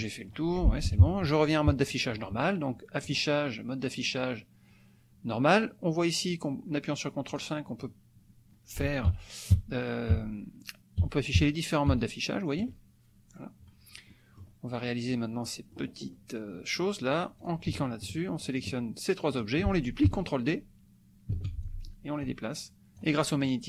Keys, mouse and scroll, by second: 0.3-1.1 scroll up 1, 0.9 KP_Subtract, 1.9 click, 3.1 click, 7.4 click, 9.1 ctrl+KP_5, 10.2 ctrl+KP_5, 14.2 click, 15.8 click, 17.5 click, 18.1 shift+click, 18.6 shift+click, 19.4 shift+click, 21.3 ctrl+d, 21.7-23.2 ctrl+drag, 23.4 click.